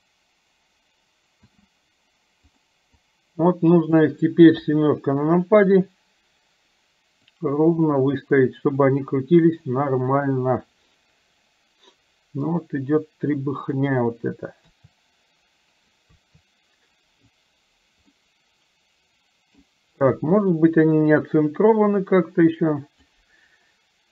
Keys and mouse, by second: 1.4 space, 2.7 click, 3.0-4.0 drag, 4.5 KP_7, 7.3 click, 7.8-8.9 drag, 10.3-13.9 drag, 14.7 KP_3, 16.2 KP_3, 18.2-19.7 middle drag, 20.2 KP_1, 22.0-23.3 drag.